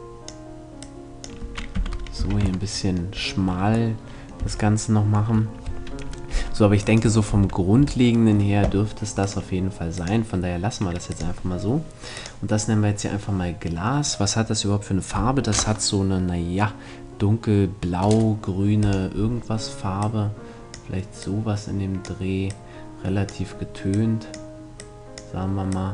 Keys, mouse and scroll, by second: 1.3 z, 1.8 a, 2.0 Tab, 4.0 a, 6.5-8.2 right drag, 7.0 Tab, 7.4 Tab, 8.8-12.5 drag, 18.4-20.3 drag.